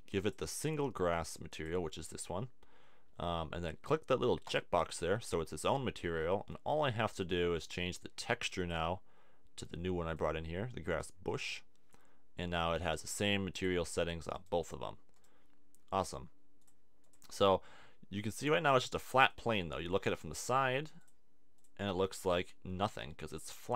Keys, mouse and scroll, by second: 4.4-6.0 drag, 12.9 click, 14.3 middle click, 14.7 click.